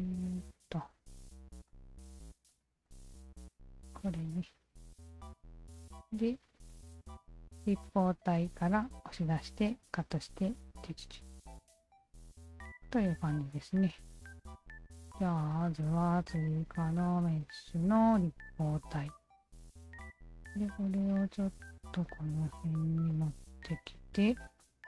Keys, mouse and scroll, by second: 1.3 alt+click, 1.7 alt+click, 2.1 alt+click, 2.5 alt+click, 2.8-4.3 alt+drag, 5.7-6.4 alt+drag, 12.9 alt+click, 13.8-15.1 alt+drag, 16.2 alt+click, 17.1 click, 18.2 alt+click, 18.9-19.7 alt+drag, 20.1 w, 21.0-22.1 alt+drag, 22.6 f, 23.1 alt+click, 23.5 alt+right drag, 23.9 alt+right click, 24.3 alt+right click, 24.6-24.8 alt+drag.